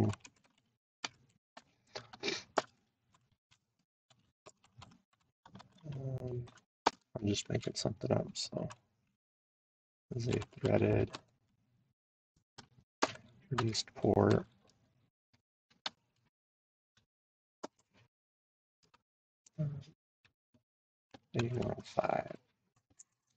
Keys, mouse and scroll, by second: 0.0-1.5 typing, 3.0-7.1 typing, 10.1-11.1 typing, 13.3-15.4 typing, 17.3-18.1 typing, 20.8-22.2 typing.